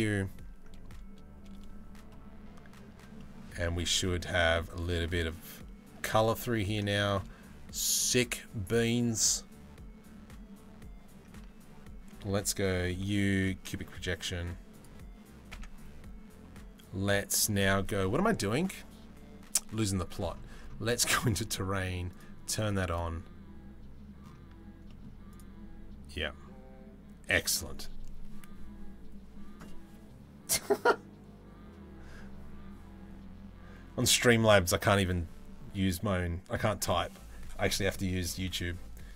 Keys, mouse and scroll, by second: 11.0 Tab, 11.9 a, 12.5 u, 15.3 Tab, 21.8 click, 24.5 middle click, 25.0 right click.